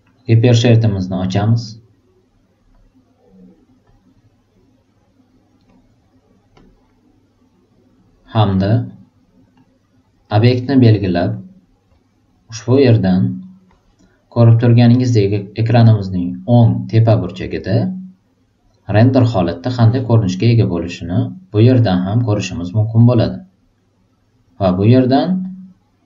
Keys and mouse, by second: 1.1 click, 3.8 click, 8.5 click, 10.2 click, 11.2 click, 13.1-13.5 drag, 21.7-24.4 drag, 25.4-26.0 drag.